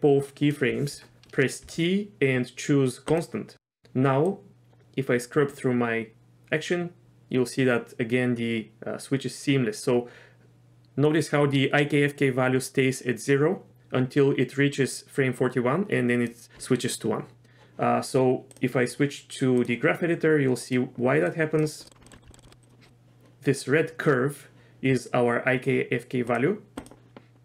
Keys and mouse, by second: 1.6 t, 4.3-16.3 drag, 19.6 click, 21.4 click.